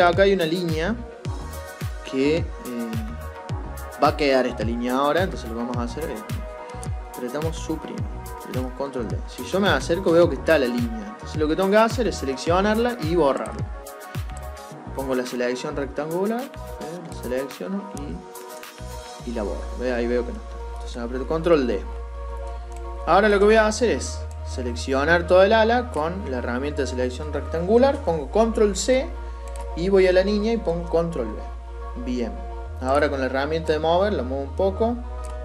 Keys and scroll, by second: 28.3 ctrl+c, 30.9 ctrl+v.